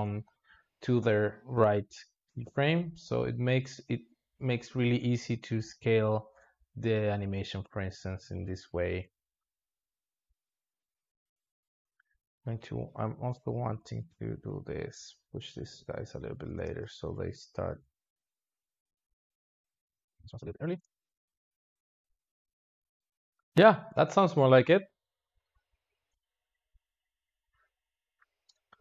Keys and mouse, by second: 9.1 click, 9.3 space, 10.2 alt+shift+z, 11.9 space, 11.9-13.5 drag, 13.5 g, 16.0-16.4 drag, 16.4 space, 16.7 alt+shift+z, 17.6 alt+shift+z, 19.6 space, 19.8 drag, 20.0 g, 20.6 click, 20.7 space.